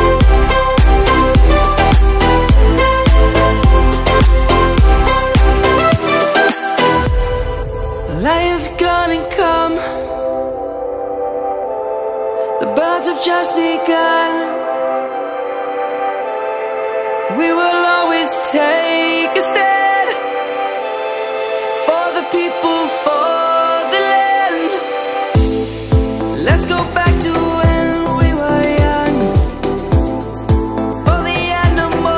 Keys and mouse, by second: 4.7 click, 5.2 s, 6.3 x, 9.5 click, 10.0 middle click, 12.3 e, 13.7 click, 14.3 Tab, 15.0 middle click, 18.8 click, 19.4 middle click, 22.3 middle click, 24.5 click, 27.0 middle click, 27.7 Tab, 28.2 middle click, 29.2 s, 30.3 right click.